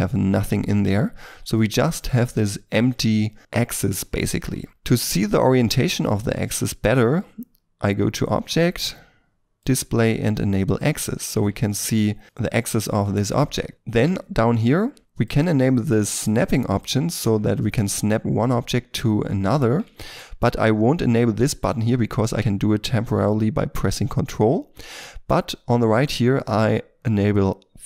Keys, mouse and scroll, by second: 0.4 Tab, 1.1 g, 4.7 shift+middle click, 4.9 middle click, 11.3 r, 11.4 r, 12.3 right click, 13.1 shift+middle click, 15.5 double click, 19.6 scroll up 1, 19.9 shift+middle click.